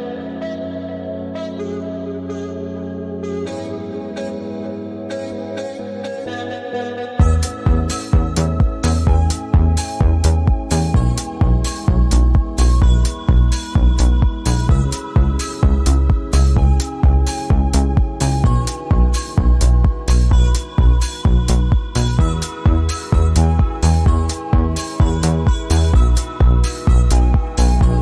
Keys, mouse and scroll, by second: 1.4 click, 2.9 alt+scroll up 1, 3.7 alt+scroll up 1, 4.3 click, 5.0 right click, 6.2 click, 7.4 right click, 8.7 click, 9.3 scroll down 1, 10.3 click, 10.6 right click, 11.7 click, 12.3-13.1 scroll up 1, 13.1 click, 13.4 a, 14.3-17.6 drag, 18.6-19.5 scroll up 1, 19.7-20.1 alt+scroll down 2, 21.5 click, 22.3 v, 22.6 click, 22.9 scroll up 1, 23.5 alt+scroll down 1, 24.1 space, 24.2 click, 25.2 scroll up 1, 27.6 right click.